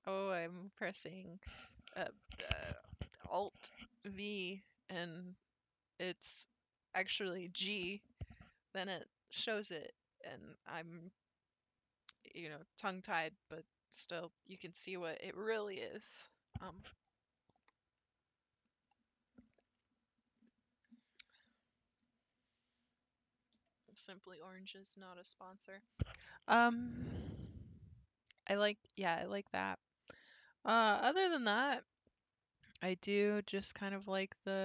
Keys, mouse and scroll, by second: 31.0-32.3 scroll down 10, 32.8 scroll down 10, 33.2-33.7 scroll up 16, 33.8-34.3 scroll down 17, 34.3-34.6 scroll up 30.